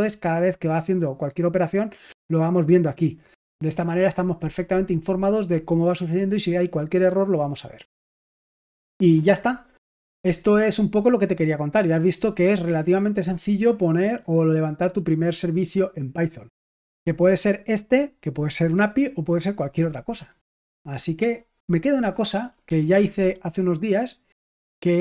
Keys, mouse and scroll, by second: 2.0-3.8 drag, 21.8 click, 22.7 ctrl+c.